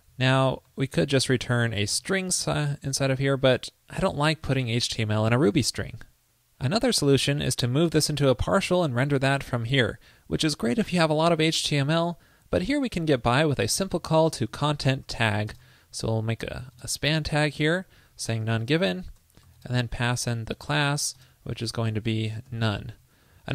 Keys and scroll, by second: 0.3 super+Right, 2.1 shift+super+Right.